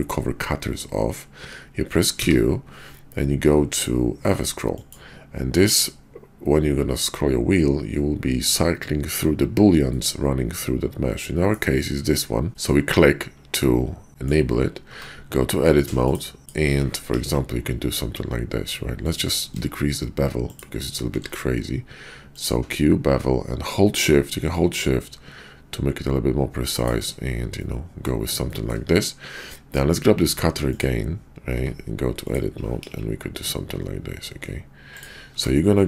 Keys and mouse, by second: 2.1 q, 11.0-12.5 drag, 12.5 middle click, 13.6-14.2 middle drag, 14.8 Tab, 16.0 click, 17.1 ctrl+b, 19.4 Tab, 20.9 q, 27.6-28.7 middle drag, 30.6 click, 31.5 Tab, 32.8 ctrl+b, 34.9 middle click, 35.3 Tab.